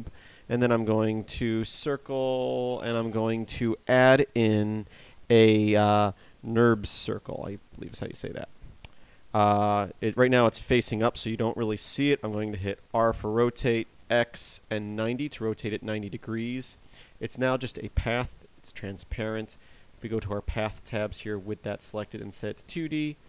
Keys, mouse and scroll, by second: 1.0 space, 13.3 r, 19.1 click, 20.5 click, 23.1 click.